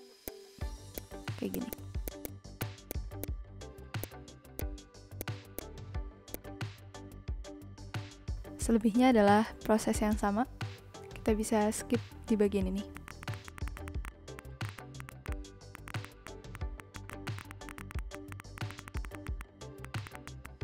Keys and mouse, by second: 0.2 click, 1.5 click, 2.6 shift+click, 4.0 click, 4.5 click, 5.2 click, 6.2 v, 6.3 click, 12.7 b, 12.9 click, 13.3 click, 13.4 click, 13.7 z, 13.7 click, 13.8 z, 13.9 click, 13.9 a, 14.0 click, 14.2 click, 14.4 click, 14.6 click, 15.0 click, 15.4 o, 15.5 shift+click, 15.7 click, 15.8 click, 16.2 v, 16.2 click, 16.4 Right, 16.7 click, 16.9 b, 16.9 click, 17.1 click, 17.2 click, 17.6 ctrl+z, 17.7 click, 18.1 click, 18.3 click, 18.5 b, 18.5 click, 18.7 click, 18.9 z, 19.1 click, 19.4 click, 19.5 click, 19.6 ctrl+z, 19.7 click, 19.8 click, 20.1 ctrl+z, 20.4 click.